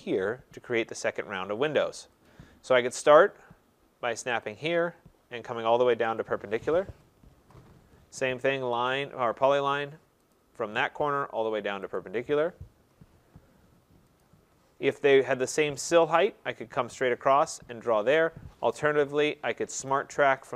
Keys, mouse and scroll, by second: 2.3 click, 2.7 middle click, 4.4 click, 6.2 click, 7.4 Return, 8.9 click, 10.3 click, 12.0 click, 12.8 Return, 14.2 click, 18.9 Escape, 19.9 click, 20.3 middle click, 20.5 middle click.